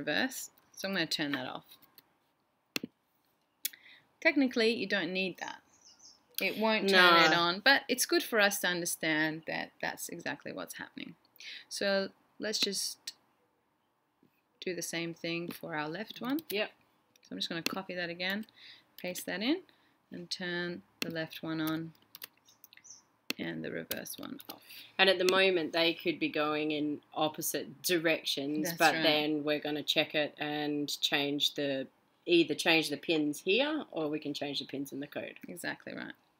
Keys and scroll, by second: 1.1-1.8 typing.